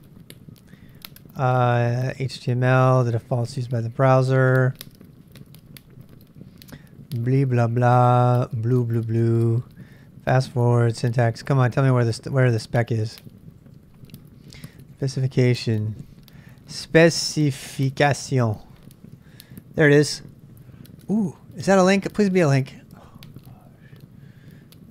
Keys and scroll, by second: 0.7-13.6 ctrl+n, 13.6-18.9 typing, 21.0-22.2 typing.